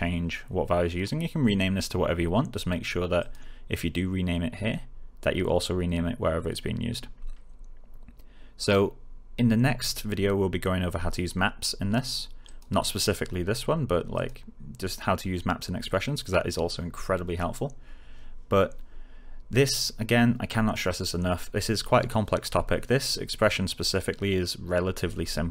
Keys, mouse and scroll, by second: 3.1 click, 12.4 click, 23.6 click.